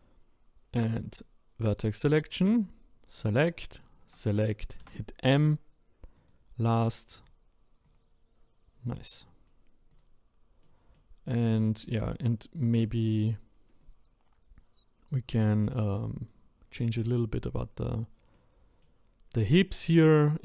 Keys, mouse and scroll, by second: 1.1 click, 2.5 click, 3.7 shift+click, 4.8 m, 7.1 click, 7.8 click, 9.5-9.9 scroll down 2, 9.9 click, 10.6 middle click, 11.1-11.6 scroll up 4, 11.6-12.6 shift+middle drag, 12.6 click, 13.8 click, 18.3-20.4 middle drag.